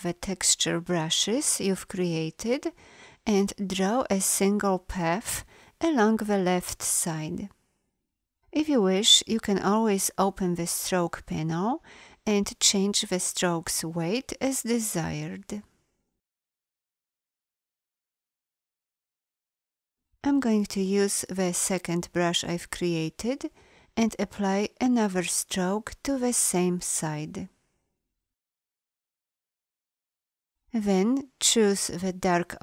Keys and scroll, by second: 3.6 b.